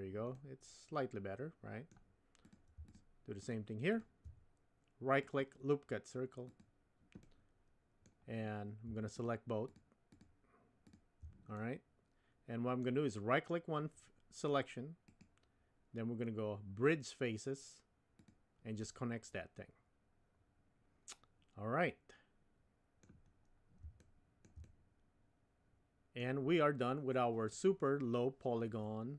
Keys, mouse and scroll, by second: 0.4-2.0 middle drag, 2.5 click, 3.9 shift+click, 5.2-6.6 right drag, 7.2 middle click, 9.6 shift+click, 10.1 shift+click, 11.5-12.8 middle drag, 15.0-18.3 right drag, 18.8-23.1 middle drag, 21.3 typing, 24.0 shift+middle click, 24.7-26.3 middle drag, 27.6-29.1 middle drag.